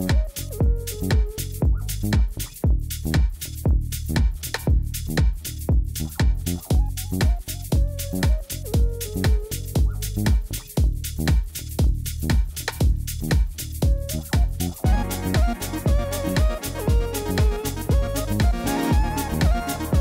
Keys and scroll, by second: 0.8 Tab, 3.4 3, 4.4 alt+a, 5.3 ctrl+r, 5.8 Return, 7.4 ctrl+b.